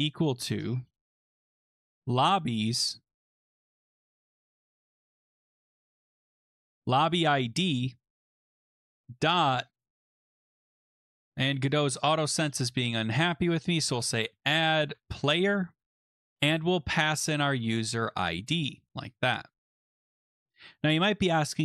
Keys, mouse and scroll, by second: 0.7-1.7 typing, 1.8 Tab, 3.3-7.3 typing, 8.2 Right, 9.0 ., 9.9 shift+a, 10.2 BackSpace, 10.6 BackSpace, 11.4 click, 12.2 typing, 13.5 click, 14.1-18.5 typing, 15.1 click, 18.8 Tab, 20.0 Return.